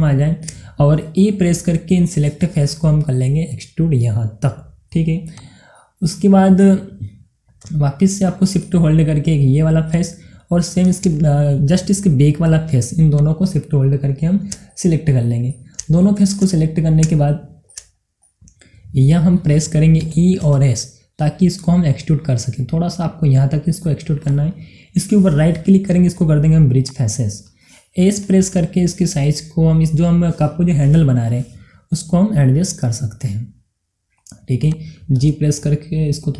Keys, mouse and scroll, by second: 0.3 shift+Num_Lock, 0.3-2.0 shift+middle drag, 2.0 e, 5.4 click, 6.3 middle click, 7.3 scroll down 1, 8.7 middle click, 8.8 middle click, 9.9 click, 10.3-13.2 middle drag, 13.2 shift+click, 15.2 middle click, 16.5 shift+middle click, 17.0 scroll up 1, 17.6 shift+middle click, 18.5-18.8 scroll down 2, 18.7 middle click, 19.5 middle click, 20.5-20.9 typing, 24.2 click, 25.6 right click, 26.8 click, 28.9 s, 34.6 click, 35.6 g.